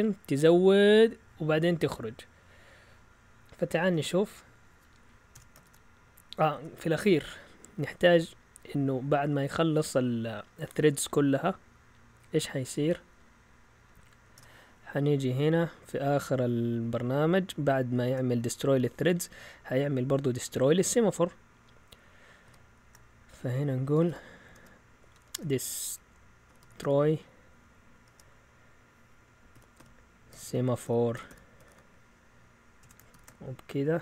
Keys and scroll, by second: 3.8 shift+super+z, 5.3 Escape, 5.6 shift+;, 6.5 BackSpace, 7.9-8.7 Down, 9.1 Down, 9.3 Down, 9.9-10.8 typing, 10.5 Up, 11.8-13.2 typing, 14.3 Return, 16.9 Up, 22.4 typing, 23.9-28.0 typing, 29.3-34.0 typing.